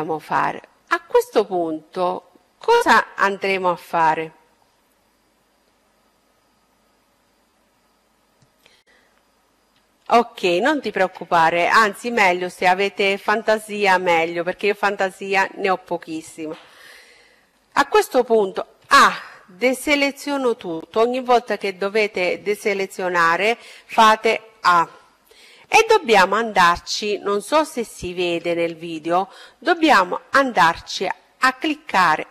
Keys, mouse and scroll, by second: 8.3-10.3 middle drag, 10.3-11.4 scroll down 1, 11.4 scroll up 1, 16.6 a, 23.6-24.9 scroll up 1, 25.7 scroll down 1, 25.8-30.0 middle drag, 29.3-32.3 right drag.